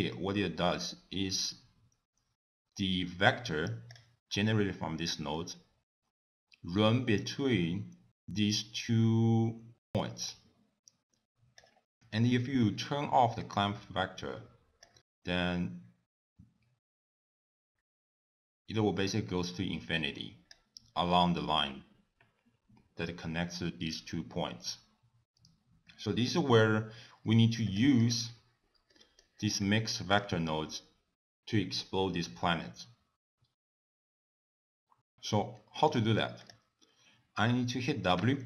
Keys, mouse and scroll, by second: 28.5 middle click, 29.1 click, 35.5 middle click, 35.9-36.3 scroll up 2, 36.1 click, 37.5 w.